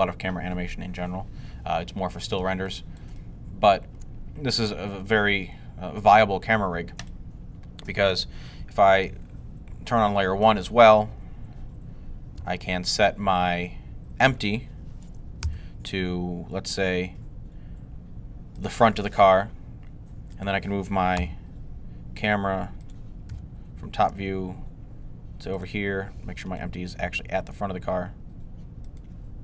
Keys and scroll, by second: 15.3 g, 21.0 g, 23.1 7, 23.9 g, 26.8 g, 29.3 0.